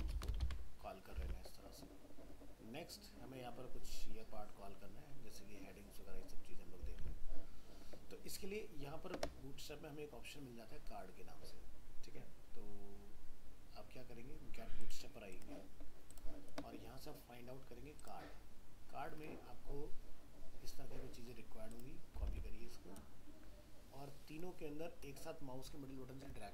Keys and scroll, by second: 0.0 ctrl+Return, 0.1 ctrl+v, 0.4 ctrl+Return, 0.4 ctrl+v, 1.2 alt+Tab, 7.0 alt+Tab, 22.3 alt+Tab.